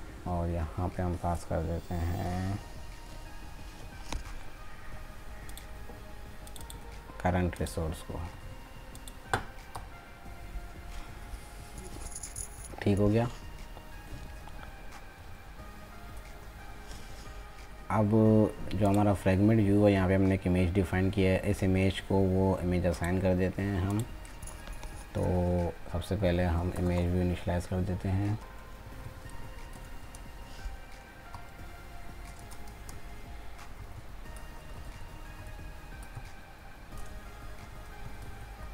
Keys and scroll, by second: 6.8 ctrl+c, 8.4 ctrl+v.